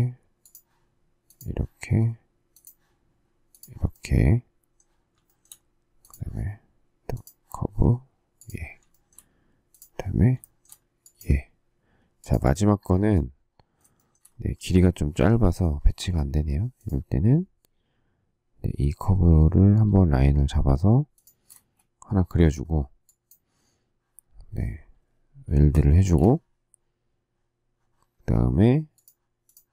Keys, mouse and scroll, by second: 5.2 shift+middle click, 8.9 shift+middle click, 10.4 shift+middle click, 13.9 shift+middle click, 21.1 shift+click, 21.6 space, 25.5 shift+w, 26.0 space.